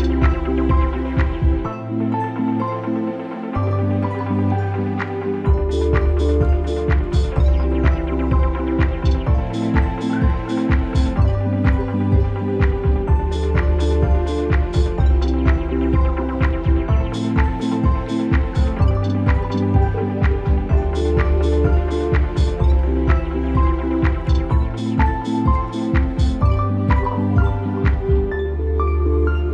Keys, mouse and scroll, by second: 2.5 click, 5.0 click, 8.9 click, 12.8 click, 14.8 click, 15.7-20.7 drag.